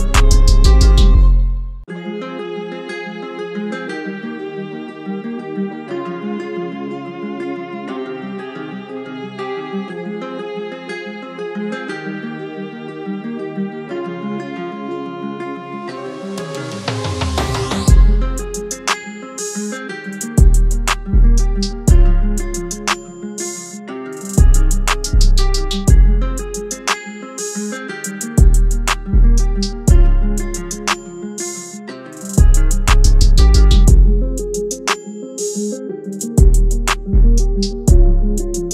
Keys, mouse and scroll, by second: 0.6-3.6 scroll up 1, 29.8 double click, 32.0-36.2 scroll down 1.